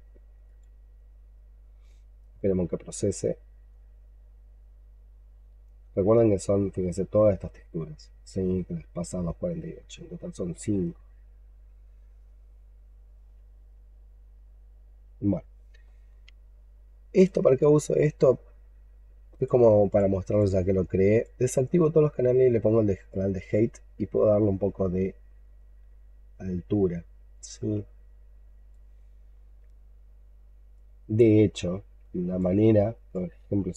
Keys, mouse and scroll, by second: 5.7-9.6 scroll down 33, 9.6-14.0 scroll up 19, 20.2 double click, 21.7-32.4 scroll down 2, 32.6 alt+click, 33.4 alt+middle click, 33.7 alt+scroll down 1.